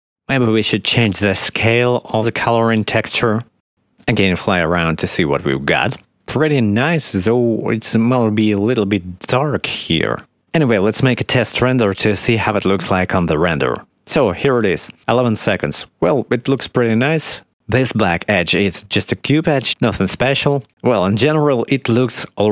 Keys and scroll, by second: 9.6 0, 11.9 F12.